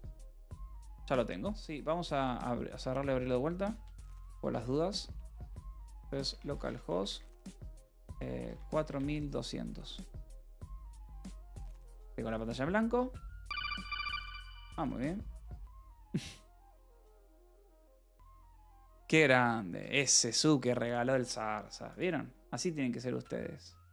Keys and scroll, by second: 4.3-8.3 typing, 8.8 Return, 16.4 BackSpace, 16.4 Return.